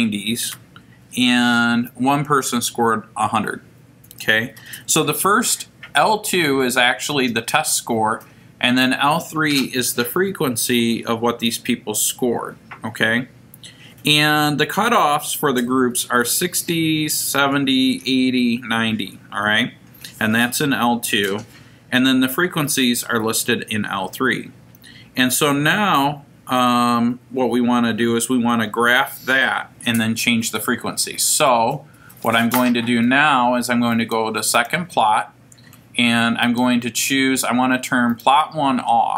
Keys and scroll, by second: 1.7 1, 3.2 Down, 36.4 Return, 38.1 Right.